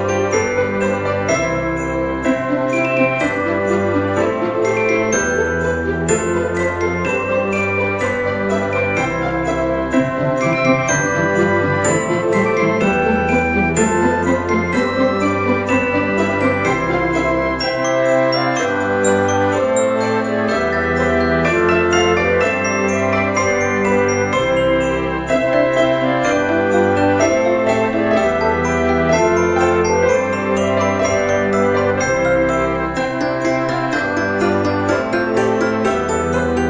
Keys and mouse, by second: 0.4 shift+click, 1.1 e, 4.2 click, 5.2 ctrl+r, 5.5 click, 6.0 right click, 6.5 ctrl+r, 6.8 click, 7.2 right click, 8.2 alt+shift+click, 8.7 middle click, 9.5 ctrl+b, 11.6 click, 12.9 click, 14.1 click, 15.5 shift+click, 16.5 e, 18.6 click, 19.2 middle click, 20.1 click, 20.5 middle click, 21.9 shift+click, 22.3 middle click, 23.0 e, 24.0 click, 24.2 Tab, 25.2 middle click, 26.0 right click, 27.0 click, 28.2 click, 32.0 click, 32.3 KP_0, 32.5 KP_Decimal, 32.8 KP_0, 34.2 click, 34.9 KP_4.